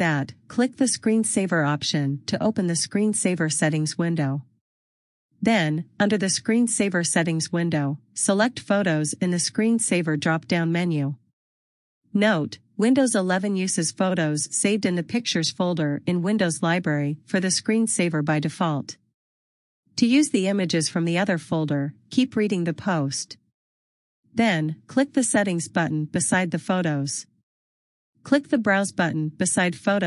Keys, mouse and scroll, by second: 3.8-4.5 scroll down 1, 5.7 click, 8.3 click, 11.4 click, 13.3 click, 27.0 click.